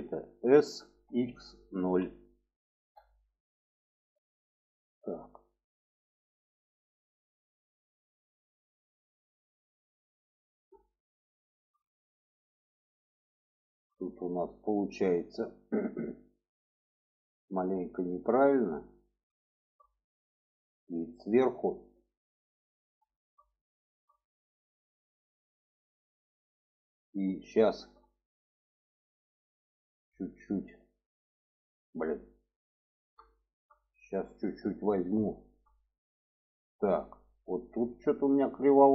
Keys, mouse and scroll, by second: 0.3 s, 3.6-9.4 drag, 10.1 middle click, 11.2 shift+middle click, 12.3 middle click, 13.4 shift+middle click, 14.8 shift+middle click, 15.9 shift+middle click, 17.7 shift+middle click, 18.2 alt+middle click, 19.1 shift+middle click, 20.3 alt+middle click, 21.3-22.4 alt+middle drag, 22.9 shift+middle click, 23.5 shift+middle click, 24.6 shift+middle click, 26.0 shift+middle click, 26.7 shift+middle click, 27.9 middle click, 29.3 alt+middle click, 30.4 alt+middle click, 31.9 middle click, 33.1 shift+middle click, 34.3 shift+middle click, 35.1 shift+middle click.